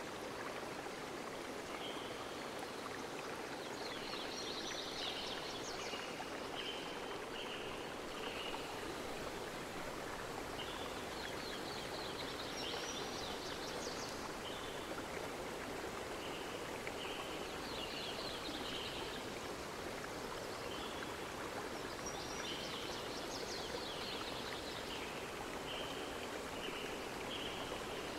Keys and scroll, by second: 2.5 z.